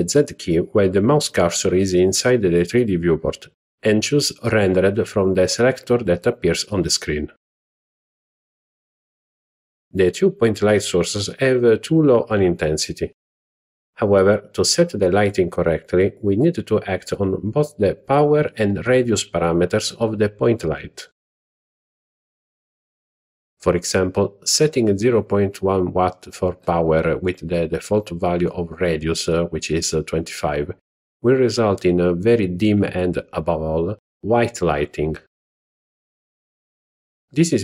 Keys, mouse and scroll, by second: 13.5 click, 16.0 click, 24.6-26.9 drag, 30.4-30.8 scroll down 2, 31.6-32.3 middle drag, 33.0 scroll up 2.